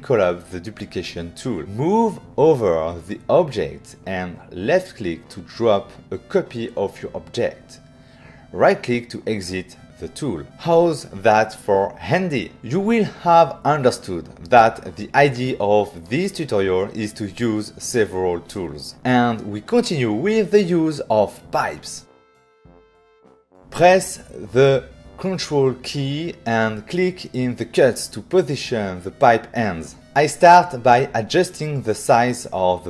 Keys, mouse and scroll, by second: 0.6 click, 1.4 click, 2.7 x, 4.6 click, 7.2 right click, 9.5 <, 18.9 <, 19.1 f, 22.0 click, 24.5 ctrl+click, 26.6 ctrl+click.